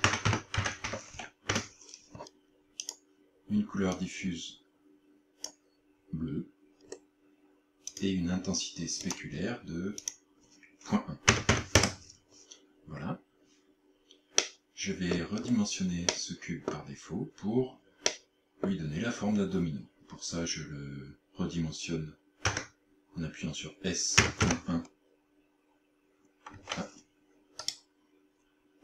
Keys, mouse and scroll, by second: 2.9 click, 6.9 scroll down 5, 8.0 click, 9.1 click, 10.0 click, 14.4 middle click, 15.4 scroll up 5, 16.2 middle click, 18.1 middle click, 22.5 s, 24.2 KP_Decimal, 24.5 KP_1, 26.6 Escape, 27.7 right click.